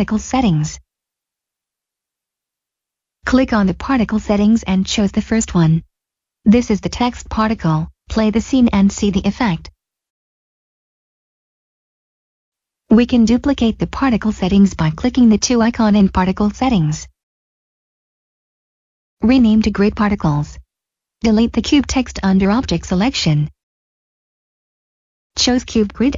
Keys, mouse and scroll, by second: 2.6 click, 7.1 click, 10.9 click, 17.1 click, 18.6 g, 18.8 Return, 20.9 click, 24.3 click.